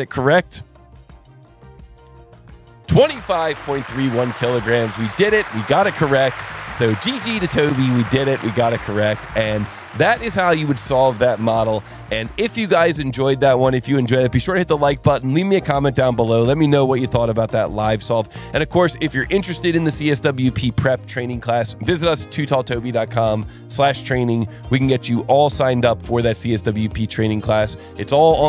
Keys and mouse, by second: 0.1 click, 25.8 click.